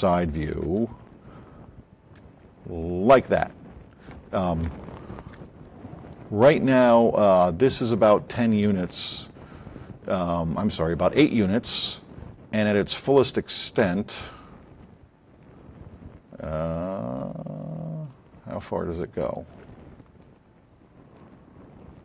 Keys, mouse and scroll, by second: 0.0 KP_2, 0.6 KP_3, 2.2 KP_3, 13.5 click, 18.4-19.4 drag, 20.1-22.0 alt+drag.